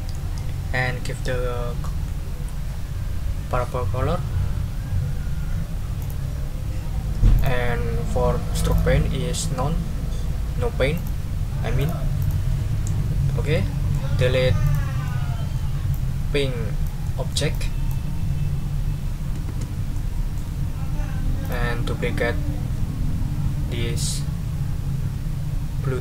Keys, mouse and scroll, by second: 6.0 click, 7.3 click, 8.7 click, 10.9 click, 11.8 click, 12.2 click, 13.5 middle click, 14.6 click, 15.0 middle click, 15.9-17.5 drag, 19.5 Delete, 19.9 click, 21.4 click.